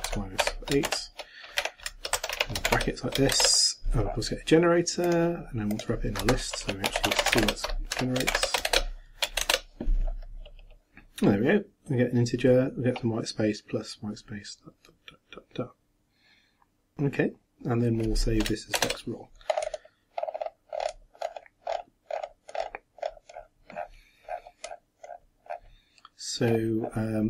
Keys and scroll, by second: 0.0-2.6 typing, 3.3 shift+Return, 7.4 shift+9, 7.9 shift+End, 8.3 shift+0, 9.4 shift+Return, 18.8 shift+Return.